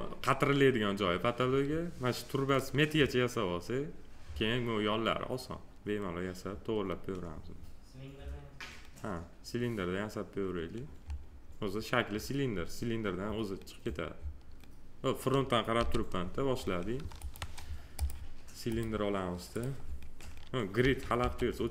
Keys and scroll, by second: 15.7 g, 20.8 g.